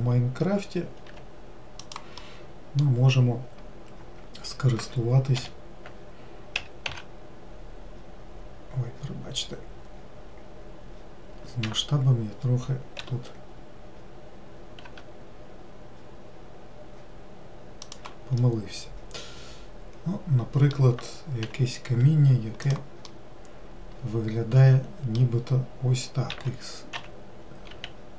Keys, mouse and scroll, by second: 0.3 click, 1.6 g, 2.7-5.8 middle drag, 5.9 l, 7.1 s, 13.5 s, 18.9-21.9 middle drag, 21.9 g, 23.6-26.7 middle drag, 26.8 s.